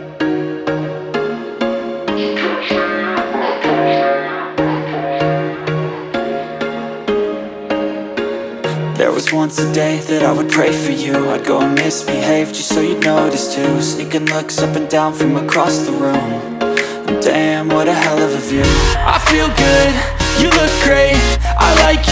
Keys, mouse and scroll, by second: 0.0-2.5 drag, 2.8 click, 2.8 r, 3.9-4.7 scroll up 3, 4.7 e, 6.0 s, 6.7 `, 6.9 g, 8.5 e, 10.0 scroll down 4, 10.4 scroll up 6, 10.7 middle click, 10.9 ctrl+b, 13.4 ctrl+r, 14.0-14.3 scroll down 1, 14.3-16.0 middle drag, 16.0 `, 16.8 scroll up 3, 17.1 scroll down 4, 17.3 s, 19.1 g, 22.0 s.